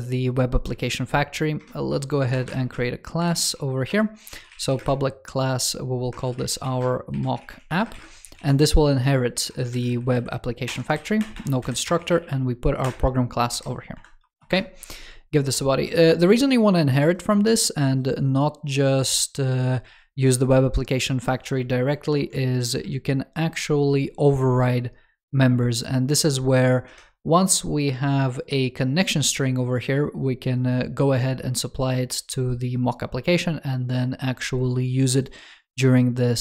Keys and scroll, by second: 0.6 super+x, 8.2 super+v, 9.7 alt+Left, 10.5 alt+BackSpace, 10.8 super+Right, 21.6 super+o, 22.5 ctrl+o.